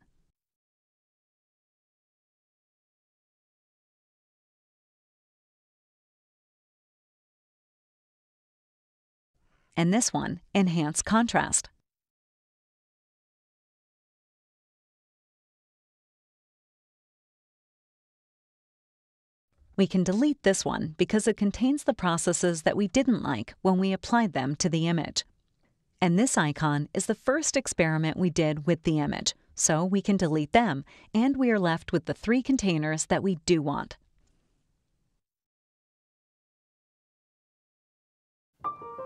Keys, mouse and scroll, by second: 1.1 right click, 3.1 click, 4.2-6.6 typing, 6.9 Return, 9.8 click, 11.9 click, 11.9 right click, 13.6 click, 14.3-17.0 typing, 21.2 click, 26.6 click, 31.4-32.5 drag, 32.7 click, 32.7 right click, 34.5 click, 35.5 click, 35.6 right click, 37.1 click.